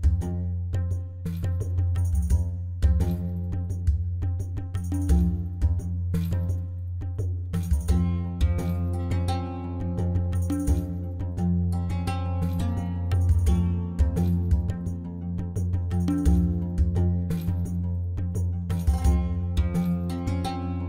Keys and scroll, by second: 11.5 ctrl+z, 13.9 ., 14.8 i, 15.5 i, 17.4 alt+a, 20.5 i.